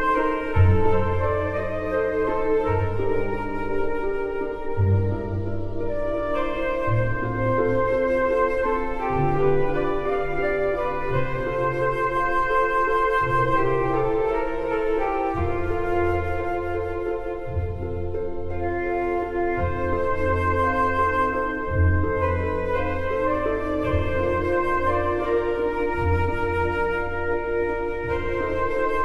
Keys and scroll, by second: 27.0 space.